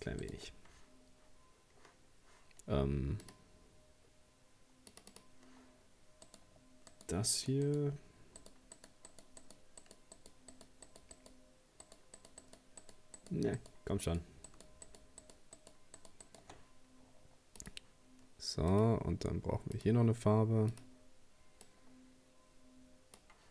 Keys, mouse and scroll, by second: 0.2 shift+right click, 2.5-3.2 scroll up 1, 3.2-6.3 drag, 6.3 right click, 6.9 shift+right click, 7.3 shift+right click, 7.7 shift+right click, 8.4 shift+right click, 8.8 shift+right click, 9.1 shift+right click, 9.4 shift+right click, 9.8 shift+right click, 10.2 shift+right click, 10.5 shift+right click, 10.9 shift+right click, 11.1 shift+right click, 11.8 shift+right click, 12.2 shift+right click, 12.8 shift+right click, 13.2 shift+right click, 13.6 shift+right click, 14.0 shift+right click, 14.5 shift+right click, 14.9 shift+right click, 15.2 shift+right click, 15.6 shift+right click, 16.0 shift+right click, 16.3 shift+right click, 17.6-23.5 drag.